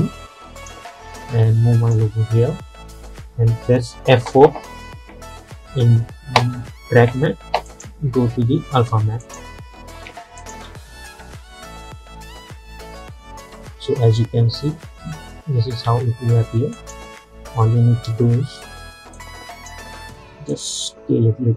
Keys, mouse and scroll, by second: 5.7 F4, 7.7 click, 10.8 space, 15.9 space, 16.8 click, 18.1 s, 19.2-21.5 drag.